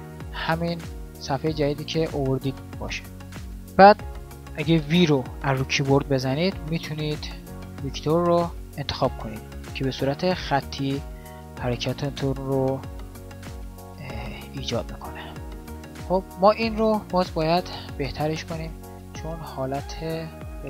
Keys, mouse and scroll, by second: 5.0 v, 18.4 alt+a.